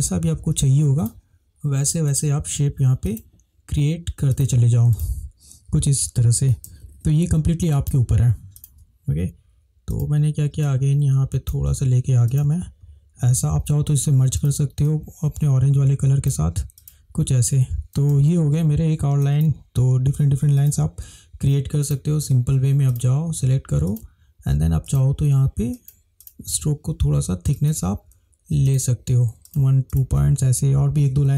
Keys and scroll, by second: 6.7 ctrl+=, 6.8 ctrl+=, 7.0 ctrl+=, 8.6 ctrl+space, 18.3 ctrl+-, 18.3 ctrl+-, 18.4 ctrl+-.